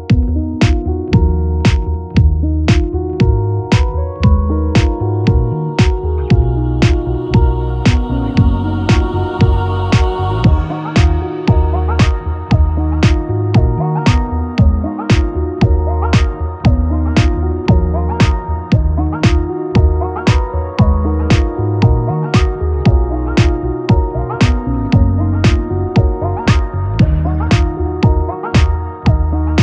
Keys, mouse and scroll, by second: 0.6 shift+z, 1.3 Tab, 1.6-3.6 drag, 1.8 3, 2.7 alt+s, 3.6-6.3 middle drag, 3.9 Tab, 6.3 click, 6.9 Tab, 6.9-20.8 ctrl+middle drag, 7.5 ctrl+r, 9.0 KP_1, 11.2 ctrl+r, 13.5 ctrl+r, 18.3 ctrl+r, 20.8 click, 20.9-23.1 middle drag, 21.7 Tab, 23.1 shift+click, 23.2-25.1 shift+middle drag, 24.0 ctrl+KP_Add, 25.1 click, 25.2 middle click, 25.5 click, 26.0-28.4 middle drag, 27.4 ctrl+a, 27.8 Tab, 28.4 click, 29.2-29.6 middle drag, 29.2 a.